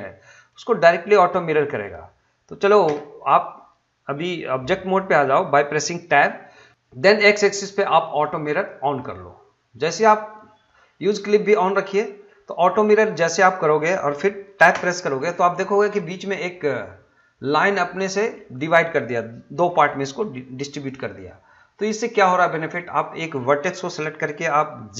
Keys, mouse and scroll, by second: 2.8 Tab, 8.5 click, 12.8 middle click, 14.7 Tab, 15.3-18.3 middle drag, 22.0 click, 22.3 middle click.